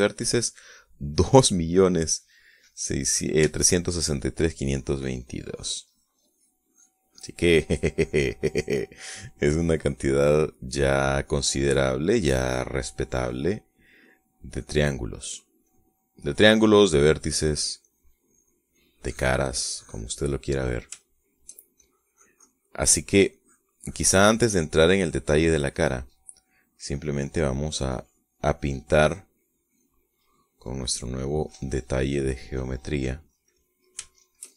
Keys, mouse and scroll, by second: 3.6 middle click, 4.4 shift+click, 5.4 click, 8.8 click, 9.8 click, 12.0 click, 13.0 click, 13.8 click, 14.8-16.2 drag, 16.4-21.1 drag, 21.2-22.6 middle drag, 22.6 shift+click, 23.5 middle click, 24.1 click, 25.5 click, 26.4 click, 27.2 click, 28.2 middle click, 28.7 click, 29.8 click, 30.3 click, 30.8 middle click, 32.0 click, 33.5 middle click, 34.2 middle click.